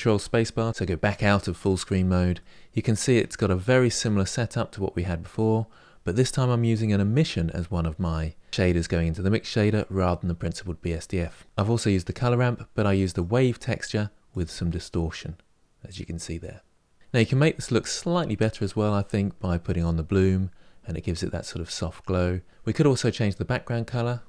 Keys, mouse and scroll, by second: 0.0 ctrl+space, 12.9 click, 14.1-16.9 drag, 19.3 click, 20.1-20.7 scroll down 2, 20.8-21.2 scroll down 2, 21.2-22.5 middle drag.